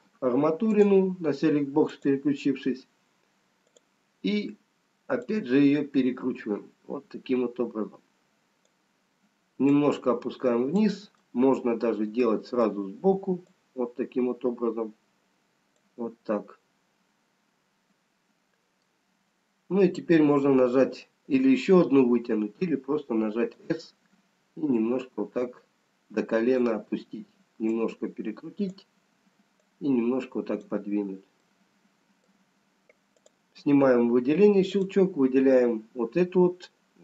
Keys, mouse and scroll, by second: 0.6 click, 2.1 click, 3.7 click, 5.3 click, 9.9 click, 11.3 middle click, 15.2 click, 17.9 middle click, 22.3 s, 25.3 click, 29.7 click, 32.2 middle click, 33.8 click, 35.1 click.